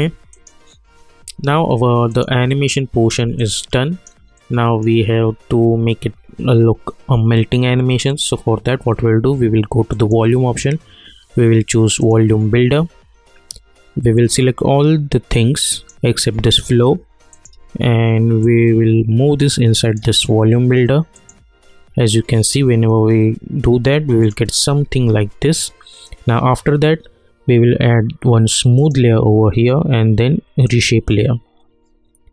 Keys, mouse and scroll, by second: 3.4 alt+click, 4.3-7.5 alt+middle drag, 8.1-21.1 drag, 24.2 click, 26.0-26.9 scroll down 1, 28.7 click.